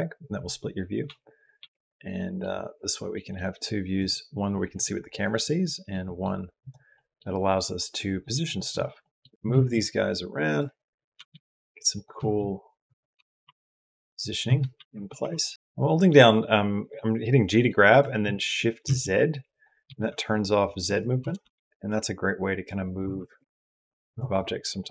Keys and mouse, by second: 0.8 q, 1.4 q, 1.9 middle click, 3.0 click, 5.8 click, 6.9 middle click, 8.5 click, 8.9 middle click, 9.3 s, 9.3 x, 9.3 g, 10.9 g, 12.1 g, 12.9 g, 14.6 shift+d, 18.7 s, 19.7 s, 21.1 g, 22.8 g.